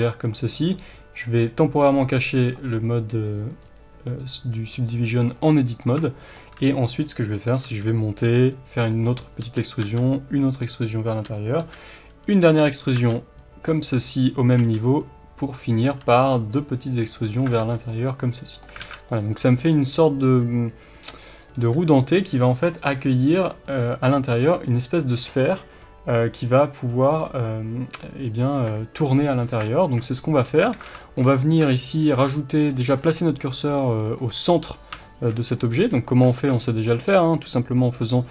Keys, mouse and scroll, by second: 1.1 click, 3.4 click, 4.3 click, 4.7 click, 5.4-9.3 middle drag, 7.6 e, 9.3 click, 9.4 e, 9.6 click, 9.8 s, 10.8 click, 11.1 e, 11.3 click, 11.6 s, 12.7 click, 12.8 g, 14.0 right click, 14.5 e, 15.6 click, 15.8 e, 17.1 click, 17.3-17.8 scroll down 2, 17.5 Tab, 17.8-19.1 middle drag, 18.8 alt+a, 19.1 click, 19.3-19.6 scroll down 1, 19.6-22.4 middle drag, 21.1-21.5 scroll up 1, 21.7 s, 22.4 click, 28.5 KP_1, 29.4 scroll down 1, 29.6-31.8 shift+middle drag, 30.1 scroll up 1, 30.7 alt+a, 31.8 shift+right click, 32.5 click, 32.9 scroll down 1, 33.1-36.5 middle drag, 35.6 scroll up 1, 35.7 Tab, 36.2 scroll down 1, 37.0-38.2 scroll up 1.